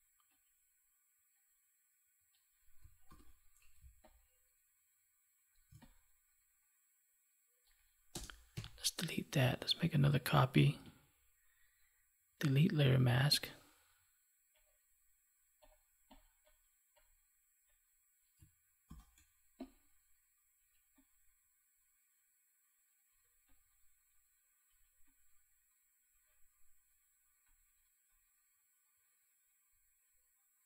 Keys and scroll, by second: 3.0 ctrl+t, 8.5 Delete, 10.5 ctrl+j, 18.8 ctrl+t.